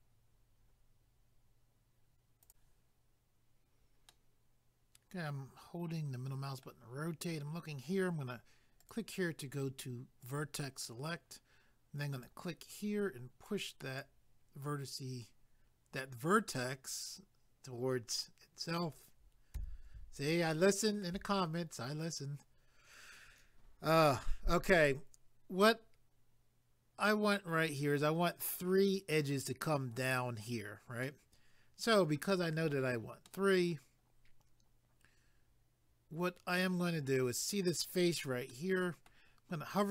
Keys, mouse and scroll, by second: 2.4 click, 4.1 middle click, 8.8 click, 10.2 click, 12.1 click, 13.5 click, 19.5 a, 20.3 shift+middle click, 31.0 middle click, 33.3 middle click, 38.5 middle click.